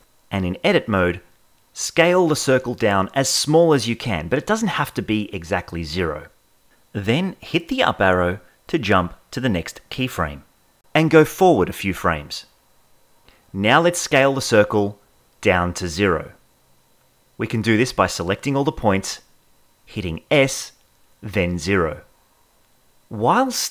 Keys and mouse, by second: 0.1 ctrl+Tab, 0.9 a, 2.6 s, 5.8 g, 7.1 Tab, 7.5 Up, 11.2 Right, 11.9 Right, 12.8 Right, 14.5 Right, 17.4 a, 18.8 s, 19.8 0.